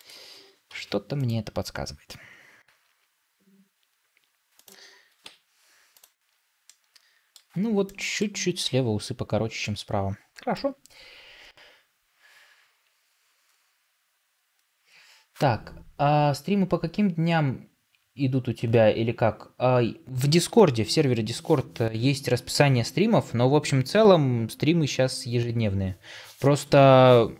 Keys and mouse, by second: 2.6 r, 5.1 Tab, 6.6-7.3 middle drag, 7.8 middle click, 9.5-10.4 middle drag.